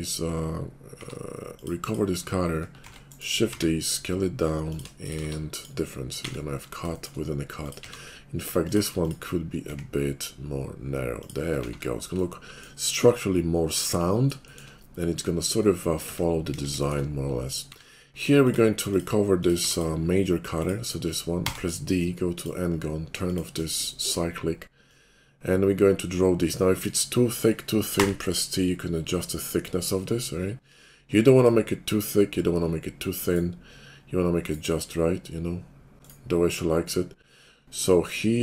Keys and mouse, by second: 0.9 q, 3.0 shift+d, 3.5 s, 5.0 shift+click, 5.2 q, 6.2 shift+2, 7.8 q, 9.6 s, 11.7 shift+2, 12.8 middle click, 14.4 shift+click, 16.5 KP_5, 16.7 shift+click, 17.7 q, 19.6 q, 21.3 d, 22.3-38.4 drag, 36.3-38.4 middle drag, 36.3-38.4 right drag.